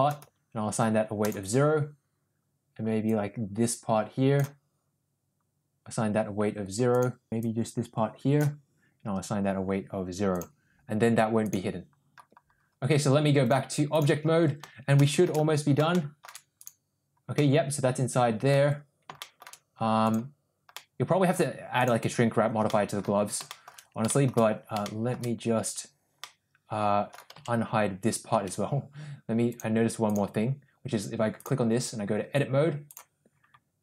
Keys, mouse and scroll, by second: 1.2 click, 3.2-4.5 drag, 6.9 click, 7.5-8.5 drag, 10.3 click, 11.5 click, 13.5-14.2 drag, 15.0 shift+middle drag, 15.9-16.2 shift+middle drag, 17.4-18.5 middle drag, 19.2 shift+middle drag, 20.7-21.3 middle drag, 22.7-23.0 middle drag, 23.5 shift+middle drag, 24.1 shift+middle drag, 24.8 shift+middle drag, 26.2-27.1 middle drag, 27.4 Tab, 28.4 Tab, 29.6 click, 31.4-33.2 drag.